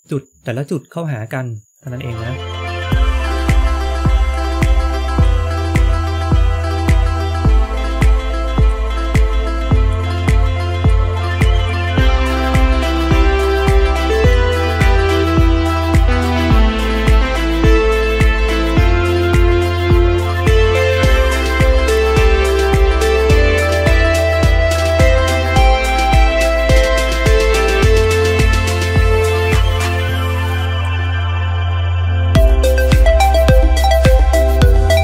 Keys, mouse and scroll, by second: 22.0 scroll down 1, 22.1 shift+middle click, 22.9 k, 30.8 k, 31.0 shift+middle click, 32.8 k, 33.5 shift+middle click.